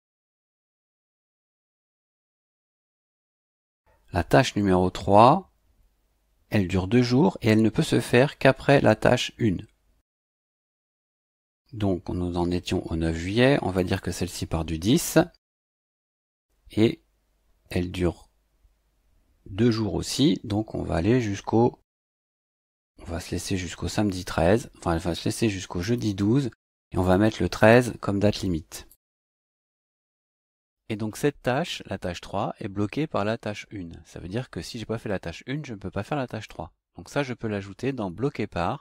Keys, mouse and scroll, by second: 0.8 click, 2.5 click, 10.8 click, 13.7 click, 15.7 click, 25.8 click, 27.0 click, 27.6 click, 28.9 click, 29.9 click, 38.0 click.